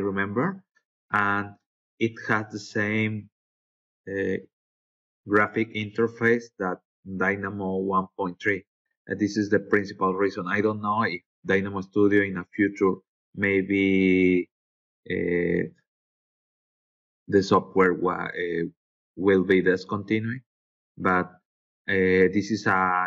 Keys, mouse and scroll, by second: 2.7 scroll up 2, 3.3-3.7 scroll up 4, 13.8-14.5 scroll down 4, 14.6 scroll up 3, 15.2 scroll down 2, 15.7 scroll up 1, 16.9-17.2 scroll down 2, 18.6-19.3 scroll up 3.